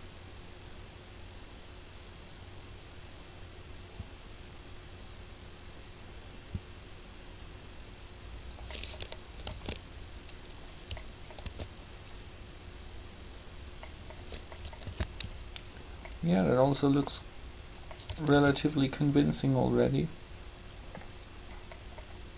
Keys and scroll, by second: 9.4 alt+a, 12.7 alt+a, 14.8 alt+a, 18.3 alt+a.